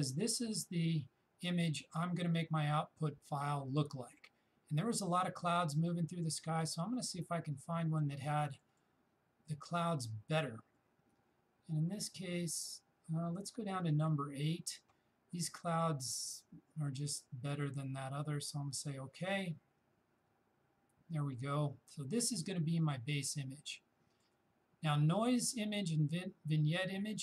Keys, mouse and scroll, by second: 7.0-13.8 shift+drag, 18.9 shift+click, 23.7-26.6 shift+drag.